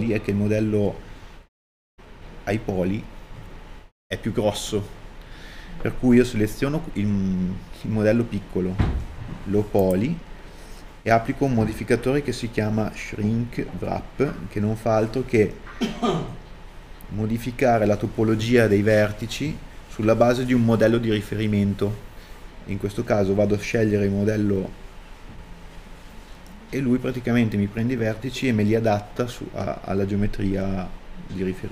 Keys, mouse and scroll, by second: 30.7 scroll down 1.